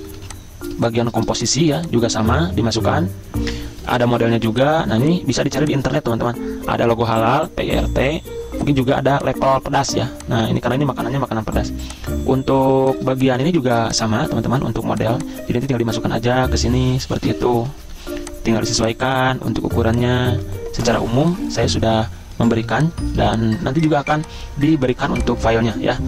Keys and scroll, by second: 0.2 z, 1.9 v, 5.0 z, 11.7 z, 12.9 v, 17.6 ctrl+shift+], 17.9 z, 18.7 v, 22.7 z, 24.2 z.